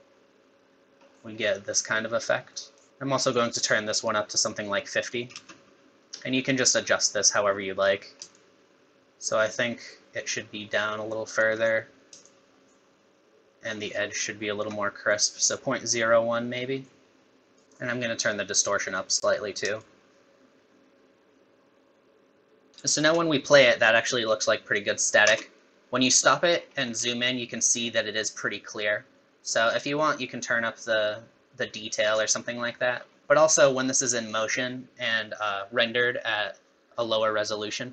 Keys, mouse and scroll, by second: 1.0 scroll up 1, 1.1 middle click, 2.6 middle click, 2.9 middle click, 4.0 click, 5.3 space, 8.3 shift+click, 12.2 shift+click, 17.6 click, 17.7 click, 19.8 shift+click, 22.7 scroll down 10, 22.7 space, 25.4 space, 26.6-27.3 scroll up 10, 29.8 click, 32.6-33.2 scroll down 10, 33.2 space.